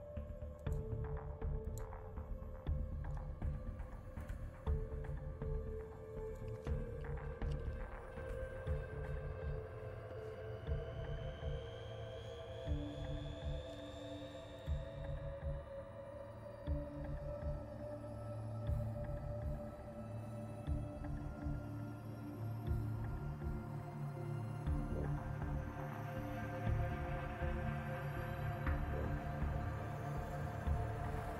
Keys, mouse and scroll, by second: 0.7 click, 1.7 click, 4.2 click, 6.3 click, 13.8 scroll up 2, 14.6 click, 17.4 scroll down 2, 18.4 scroll up 2, 19.6 scroll down 2, 21.6-22.4 scroll down 3, 26.2 scroll down 1, 28.7 scroll down 2.